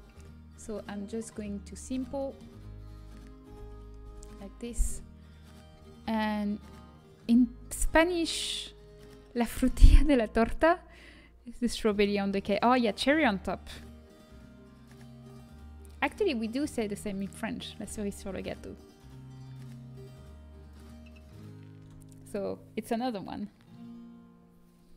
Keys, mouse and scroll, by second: 1.2-3.4 middle drag, 3.4 Tab, 4.5 Tab, 4.8 Tab.